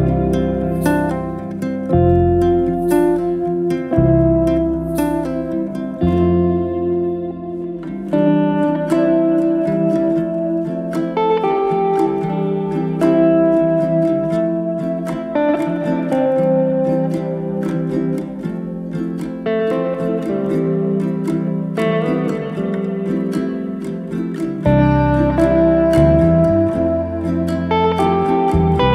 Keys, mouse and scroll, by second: 0.3 click, 1.2 ctrl+a, 4.6 click, 7.1 click, 7.6 a, 8.8-10.4 drag, 13.5 click, 14.0 click, 14.6 ctrl+a, 15.5 click, 15.9 ctrl+a, 16.6 click, 17.0 ctrl+a, 18.1 click, 18.5 ctrl+a, 19.3 click, 19.6 ctrl+a, 20.9 click, 21.2 ctrl+a, 22.5 click, 22.8 ctrl+a, 23.6 click, 24.0 ctrl+a, 25.4 click, 25.7 ctrl+a, 26.8 click, 27.2 ctrl+a.